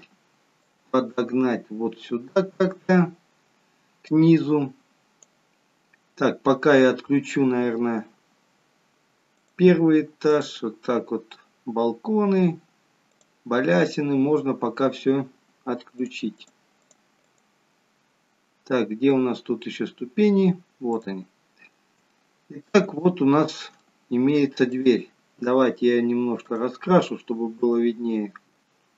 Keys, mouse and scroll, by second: 0.6 click, 4.0 click, 6.9-7.3 scroll up 1, 7.3-7.8 scroll down 1, 9.3 click, 10.4 click, 13.6-15.7 scroll down 2, 16.0 click, 16.3 click, 18.3-19.0 scroll up 2, 19.5-19.9 scroll down 3, 20.9 click, 20.9-21.9 scroll down 4, 22.0 shift+middle click, 23.9 shift+middle click, 24.7 click, 26.4 click.